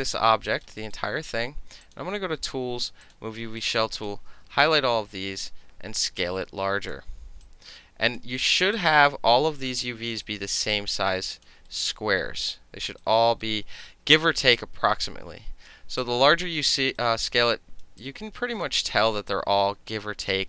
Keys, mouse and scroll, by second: 0.5 alt+right click, 0.8 alt+middle click, 1.9 click, 3.1 click, 3.6-4.1 drag, 4.7 r, 5.4-6.9 drag, 7.5 alt+click, 8.2 alt+middle click, 8.4 alt+right click, 8.6 alt+middle click, 8.8-10.1 alt+drag, 10.1 alt+middle click, 10.3 alt+right click, 10.6 alt+middle click, 10.7 alt+right click, 11.5 alt+middle drag, 11.9-13.0 alt+middle drag, 13.0 alt+right click, 13.2 alt+middle click, 13.4-14.6 alt+middle drag, 14.6-15.7 drag, 15.7 alt+middle click, 16.0-16.7 alt+drag, 16.7 alt+middle drag, 17.0-17.8 alt+right drag, 18.0-18.7 alt+drag, 18.9 alt+middle drag, 19.3-20.3 alt+drag, 20.3 alt+middle click.